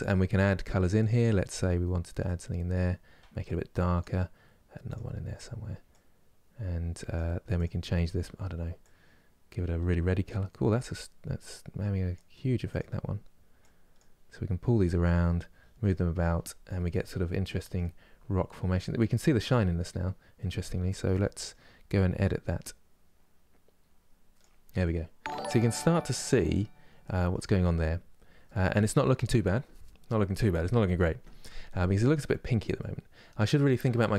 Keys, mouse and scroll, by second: 0.8-8.5 drag, 13.4-15.9 drag, 15.9-16.6 scroll down 3, 16.6-17.7 middle drag, 17.7 scroll up 4, 18.2-18.7 scroll down 1, 18.7-22.1 middle drag, 22.1-24.4 drag, 24.4 scroll down 1, 25.0 middle click, 25.9-26.3 scroll up 1, 26.7 middle click, 27.6-28.1 scroll down 1, 28.1-34.1 middle drag.